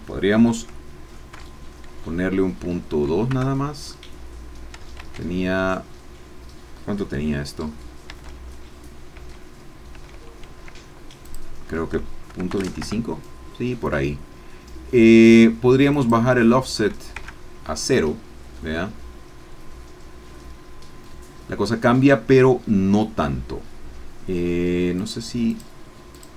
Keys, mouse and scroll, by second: 1.3 KP_Decimal, 2.9 KP_2, 3.3 KP_Enter, 5.2 ctrl+z, 8.3 ctrl+z, 10.1 ctrl+z, 11.2 click, 12.3 KP_Decimal, 12.5 KP_2, 12.7 KP_5, 12.8 KP_Enter, 15.9 click, 17.1 KP_0, 17.2 KP_Enter, 18.6-22.9 middle drag, 22.9-23.2 scroll up 1, 25.0 click, 25.5 click, 26.1 click.